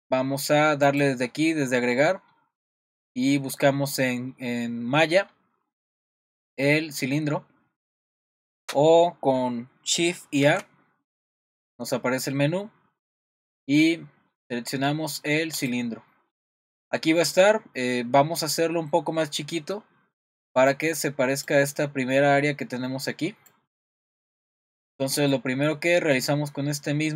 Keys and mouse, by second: 0.8-8.2 drag, 8.6 Escape, 10.4 shift+a, 17.3-18.4 middle drag, 25.0-27.1 middle drag.